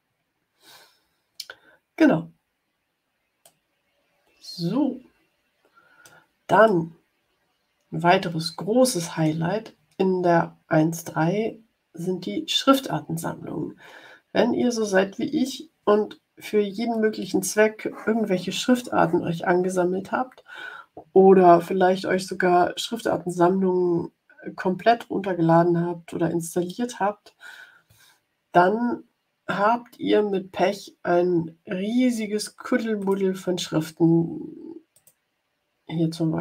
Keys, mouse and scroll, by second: 3.3 click, 3.6 middle click, 6.1 click, 6.5-9.3 drag, 32.9 click, 34.9 click.